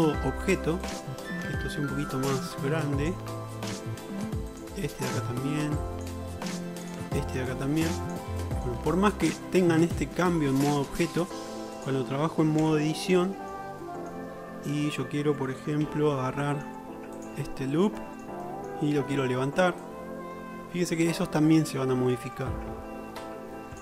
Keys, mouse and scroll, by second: 2.2-5.3 middle drag, 5.5-7.0 drag, 7.0-7.6 middle drag, 7.6 click, 8.4 shift+middle click, 10.5-11.0 shift+middle drag, 11.0-12.0 drag, 12.7 Tab, 12.7 middle click, 13.2 shift+middle click, 15.9 1, 16.5 middle click, 16.9 alt+click, 18.2 shift+middle click, 20.0-21.4 drag.